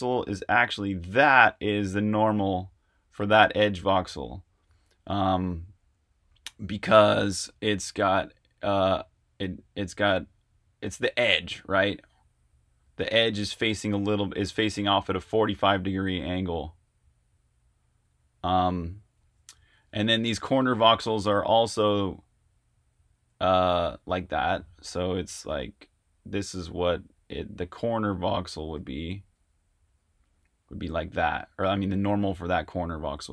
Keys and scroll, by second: 0.4 r, 18.5 super+z, 23.3 super+z, 28.9 typing.